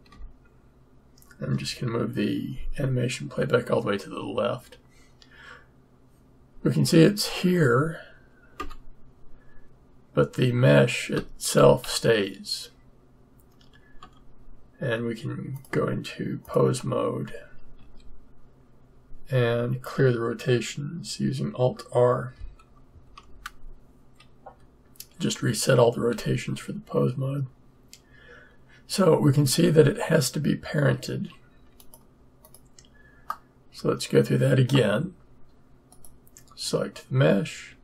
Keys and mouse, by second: 0.1-1.5 Left, 8.5 Tab, 14.0 Tab, 15.5-17.3 drag, 17.7 a, 22.9 alt+r, 26.1 a, 29.5 Tab, 31.7 click, 33.6-37.8 middle drag.